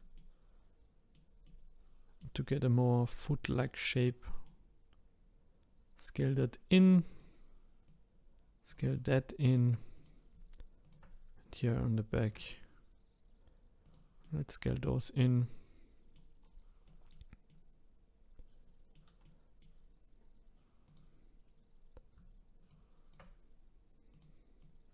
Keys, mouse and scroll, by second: 0.1-3.2 middle drag, 3.2 click, 4.4-7.1 middle drag, 7.1 click, 7.8 click, 8.9-9.9 middle drag, 9.9 click, 10.8 shift+click, 12.3 s, 14.2-16.4 middle drag, 16.4-16.8 scroll down 4, 16.8-20.9 middle drag, 20.9 click, 21.4-22.7 scroll up 4, 22.7 shift+click, 24.1 click.